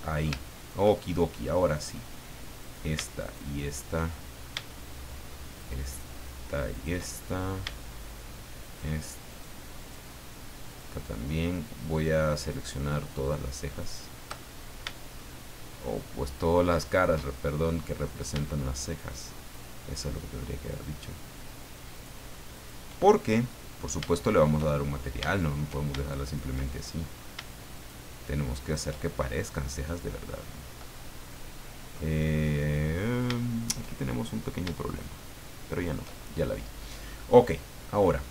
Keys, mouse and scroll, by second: 0.0 middle click, 1.8 click, 2.6 right click, 3.2 shift+right click, 4.7 shift+middle click, 5.6 shift+right click, 6.1 shift+right click, 6.7 shift+right click, 7.0 shift+middle click, 8.6 shift+right click, 9.3 shift+right click, 9.8 shift+right click, 10.7 shift+right click, 12.5 shift+right click, 13.8 shift+right click, 14.4 shift+middle click, 16.8 shift+right click, 17.2 shift+middle click, 18.8 shift+right click, 19.5 shift+right click, 20.0 shift+middle click, 21.9 shift+right click, 22.5 shift+right click, 23.2 shift+middle click, 24.7-25.7 shift+middle drag, 26.2 shift+right click, 26.6 shift+middle click, 27.7 shift+right click, 28.6 shift+right click, 29.0-30.3 shift+middle drag, 30.9-32.1 middle drag, 32.2-32.6 scroll up 2, 32.9-33.2 scroll up 2, 33.4 shift+middle click, 34.1 shift+scroll up 3, 35.7 shift+right click, 36.1-37.0 shift+scroll down 5.